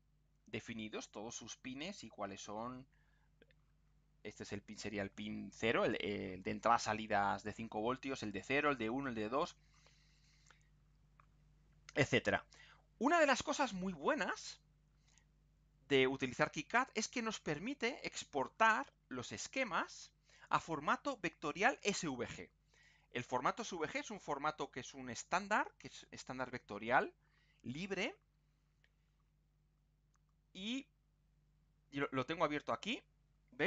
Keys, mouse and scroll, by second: 10.9-11.4 scroll down 2, 11.8 scroll down 2, 12.2-13.2 scroll up 4, 15.9 scroll down 2, 20.4 click, 31.9 click.